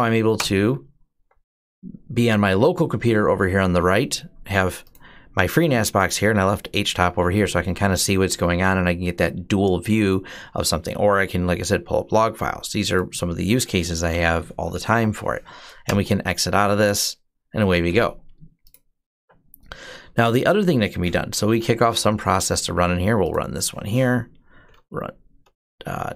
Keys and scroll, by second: 0.1 Return, 13.9 ctrl+c, 14.1-15.2 typing, 15.6 Return, 19.0 typing, 20.9-21.9 typing, 24.2-26.1 typing.